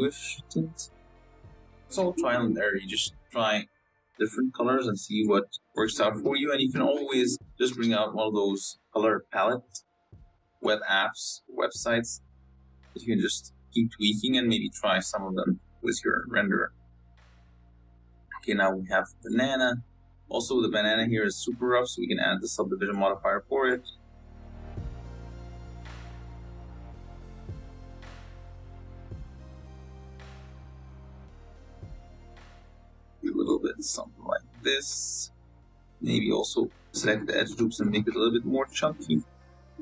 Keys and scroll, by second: 24.4 z, 29.4 Tab, 30.9 ctrl+r, 33.3 2, 34.6 s, 36.2 s, 38.4 s, 39.1 Tab.